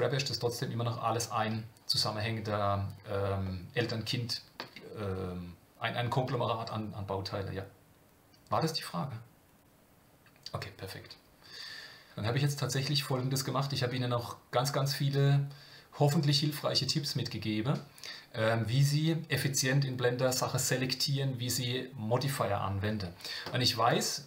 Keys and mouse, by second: 3.4 middle click.